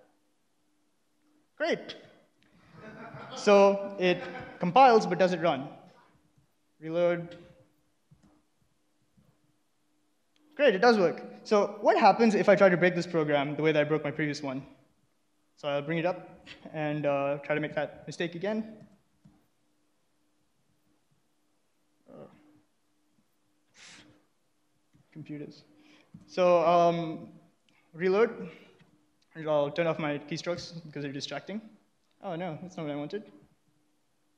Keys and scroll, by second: 2.4-4.0 typing, 4.3 ctrl+a, 4.4 Right, 5.6-9.7 typing, 14.1 ctrl+a, 15.1 alt+1, 16.5 ctrl+a, 16.6 Left, 17.5-19.3 typing, 20.6 ctrl+[, 21.0 shift+;, 21.2 Return, 23.2 w, 24.1 shift+;, 24.9 w, 25.0 Return.